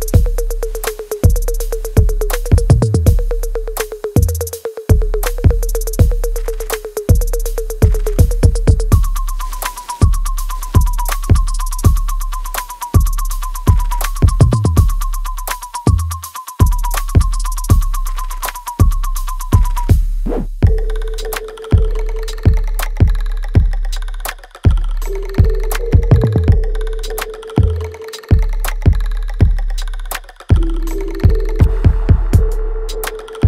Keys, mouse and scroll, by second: 1.7 w, 2.4-6.2 drag, 6.2 space, 7.0-8.3 alt+drag, 8.3 alt+middle click, 9.5 space, 10.5-13.0 drag, 13.0 space, 13.6 right click, 14.7 click, 15.0 alt+click, 15.7 alt+middle click, 16.7 click, 18.3 alt+right click, 18.9 alt+click, 19.4 alt+middle click, 19.9 alt+right click, 20.3 alt+middle click, 20.7 alt+click, 21.2 alt+right click, 21.7 alt+middle click, 22.2 alt+right click, 22.7-25.5 alt+drag, 29.5 right click, 30.4 space, 31.6 click, 33.0 r.